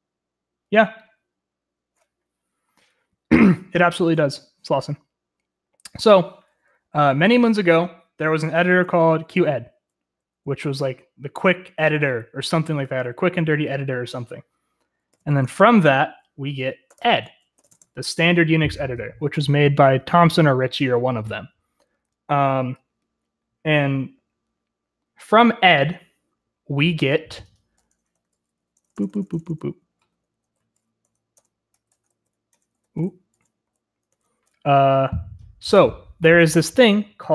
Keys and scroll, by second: 8.5-9.4 typing, 10.4 typing, 15.3 typing, 16.8-18.2 typing, 29.8 Escape, 30.0 o, 30.5-30.8 space, 31.0 space, 31.5 |, 32.3 Return, 32.7-34.9 typing, 33.8 Tab, 34.4 Tab.